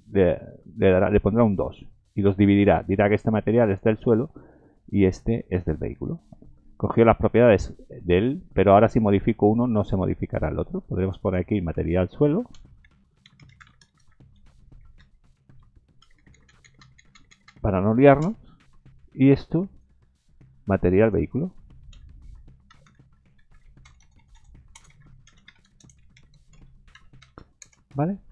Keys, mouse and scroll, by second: 11.0 click, 16.2 Delete, 16.3 Delete, 16.6 Delete, 16.8 Delete, 17.1 Delete, 17.3 Delete, 19.7 click, 21.0 click, 23.1 j, 24.0 BackSpace, 24.2 BackSpace.